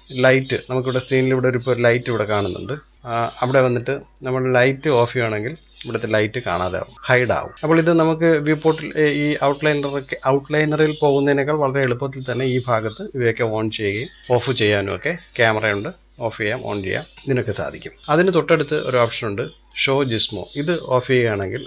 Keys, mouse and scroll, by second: 0.7-2.5 scroll down 2, 2.5 scroll down 2, 2.7-3.4 shift+middle drag, 3.4-6.4 drag, 6.9-8.6 drag, 12.1-14.5 drag, 20.5 click, 21.2 click.